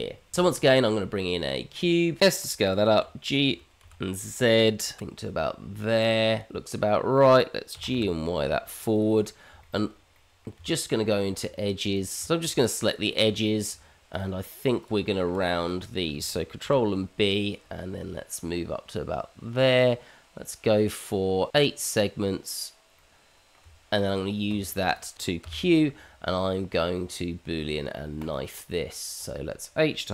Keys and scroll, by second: 0.3 shift+a, 2.3 s, 3.0 g, 7.7 g, 10.5 Tab, 16.6 ctrl+b, 23.6 Tab, 25.4 q.